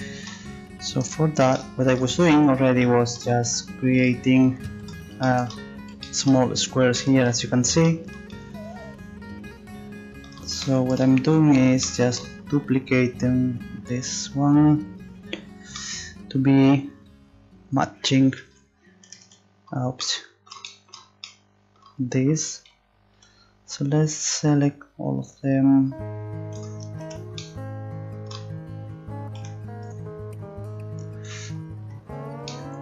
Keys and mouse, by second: 1.1 Tab, 2.2 z, 3.2 z, 3.4 Tab, 4.8 a, 23.1 c, 27.4 middle click, 29.4 c.